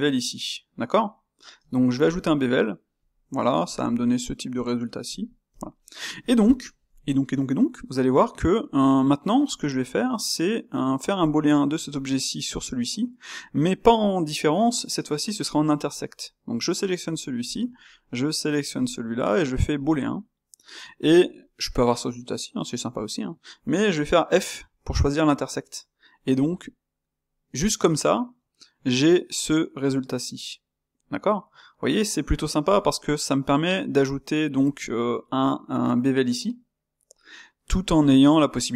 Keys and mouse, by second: 0.1-2.1 middle drag, 2.1 space, 5.7-12.4 middle drag, 12.4-17.5 drag, 20.7 space, 21.4-28.6 middle drag, 29.3-32.2 middle drag, 32.8-38.7 middle drag.